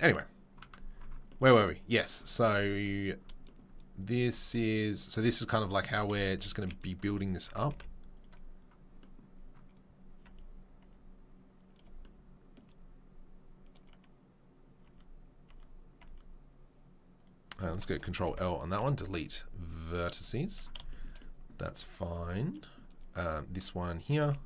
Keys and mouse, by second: 0.0-21.7 middle drag, 5.9 Tab, 6.5 z, 7.5 Tab, 7.7 z, 10.2 Tab, 10.8 Tab, 14.8 Tab, 15.5 Tab, 17.9 Tab, 18.1 ctrl+l, 18.8 Delete, 21.7 Tab, 22.1 Tab, 23.2 click, 24.1 z.